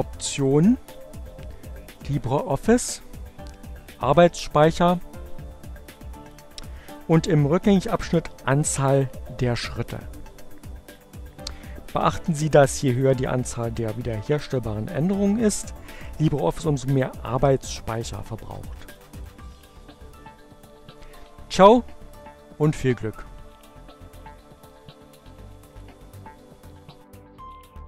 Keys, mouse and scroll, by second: 1.6 click, 2.9 click, 16.7-19.3 drag, 24.9-25.9 drag.